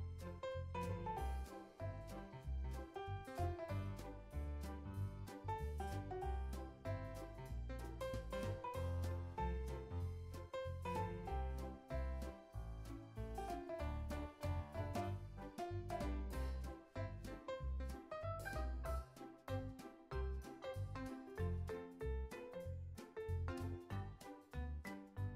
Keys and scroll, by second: 14.1 super+s, 14.5 space, 19.8 space, 20.1 super+s, 20.5 z.